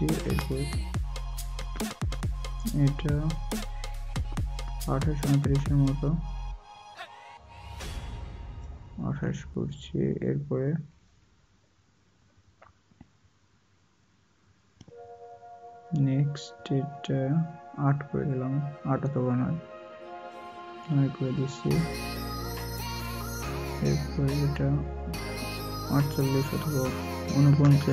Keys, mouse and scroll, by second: 9.4 right click.